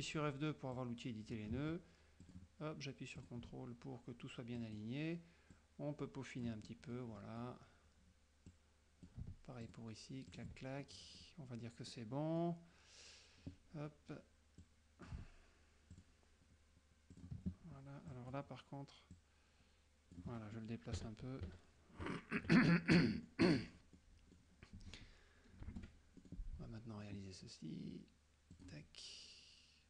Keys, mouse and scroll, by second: 0.9 click, 2.4 ctrl+click, 3.3 ctrl+click, 4.7 click, 5.6 click, 6.7 middle click, 8.6 click, 9.7 ctrl+click, 10.4 ctrl+click, 11.0 ctrl+middle click, 12.0 middle click, 12.6 click, 14.7 click, 16.0 ctrl+click, 17.3 ctrl+click, 18.2 click, 19.2 click, 21.0 KP_Subtract, 23.3 middle click, 25.8 shift+F6, 26.2 shift+middle click, 28.6 click.